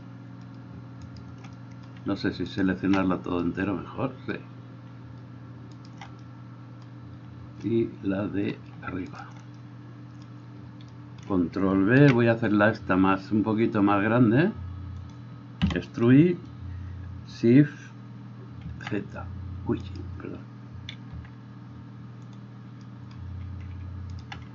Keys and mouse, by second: 1.3 shift+right click, 2.8 alt+shift+right click, 6.0 alt+shift+right click, 12.1 ctrl+b, 15.4-20.1 middle drag, 15.9 e, 19.0 shift+z, 20.1-21.3 right drag, 21.3-24.5 middle drag, 21.3 z.